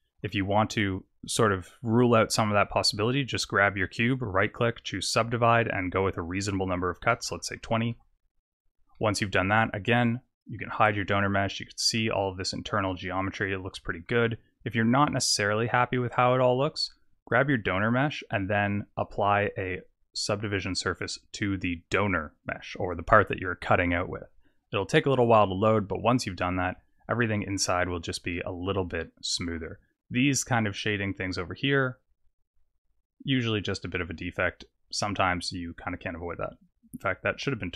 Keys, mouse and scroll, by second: 0.3 middle click, 3.9 right click, 6.3 click, 8.3 Tab, 8.9 middle click, 10.4 click, 10.9 middle click, 11.4 scroll up 4, 11.9 middle click, 17.3 click, 18.1 click, 18.8-19.5 scroll down 5, 19.5 click, 24.7-26.6 scroll up 4, 26.6 click, 27.2 middle click, 27.8-28.3 scroll up 3, 28.3 middle click, 30.7 click, 31.2 right click, 34.7 click, 36.4 click.